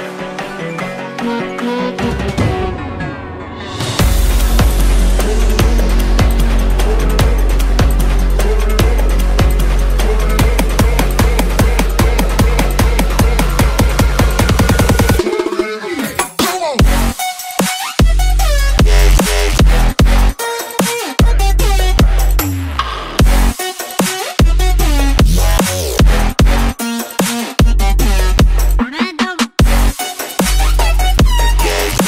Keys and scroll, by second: 0.6 space, 2.1 space, 4.2 space, 23.8 space, 24.3 space, 24.9 space, 31.2 alt+v.